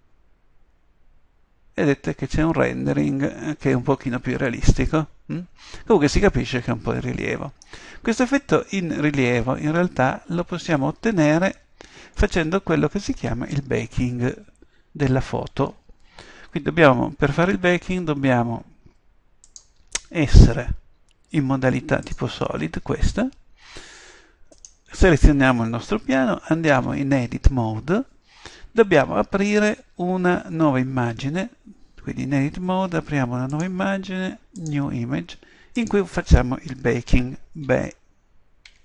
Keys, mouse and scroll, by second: 6.3 middle click, 26.8 Tab, 33.5-35.4 drag.